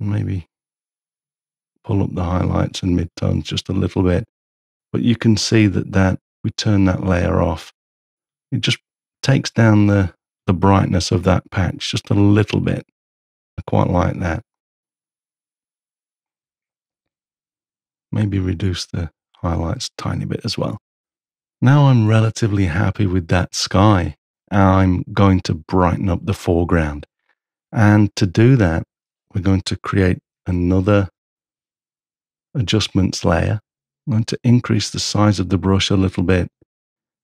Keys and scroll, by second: 30.4 ctrl+super+a, 33.7 ], 36.5 [.